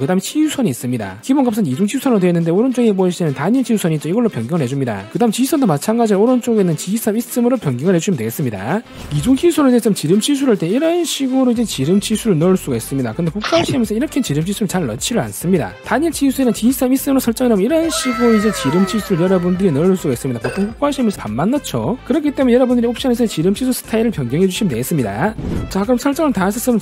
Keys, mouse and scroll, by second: 4.6 click, 7.2 click.